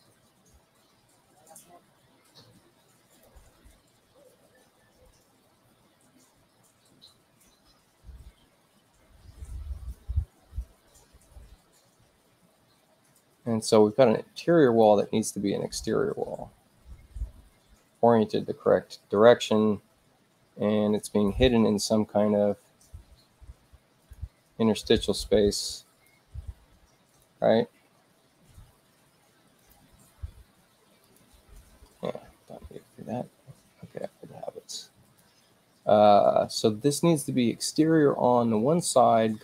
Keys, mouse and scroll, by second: 3.1 click, 14.6 click, 17.2 space, 24.0 click, 25.2 click, 27.0 click, 28.6 u, 29.5 click, 31.0 click, 33.5 space, 35.0 click.